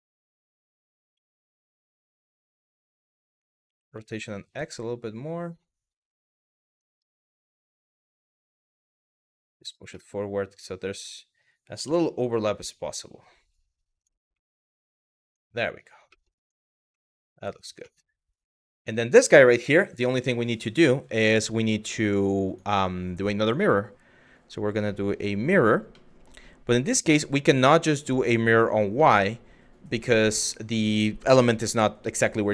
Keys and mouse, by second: 0.3 click, 0.9-2.3 middle drag, 3.3 r, 3.6 x, 6.4 click, 6.9 middle drag, 7.5 KP_3, 8.3 g, 9.2 click, 9.6-10.7 middle drag, 11.5 KP_3, 12.1 g, 13.6 click, 14.1-14.7 middle drag, 14.9 click, 15.8 middle click, 16.7 middle drag, 17.4 middle drag, 20.6-21.9 drag, 22.1 click, 23.0-25.2 drag, 25.5-25.9 middle drag, 27.1 click, 27.5 click, 27.8 click, 28.2 click, 28.7-30.1 middle drag.